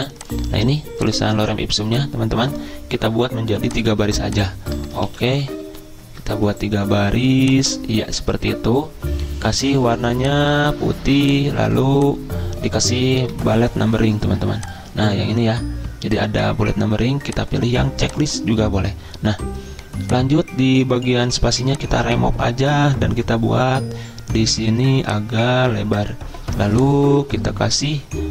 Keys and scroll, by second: 5.1 ctrl+shift+Down, 5.7 ctrl+shift+End, 13.2 Delete.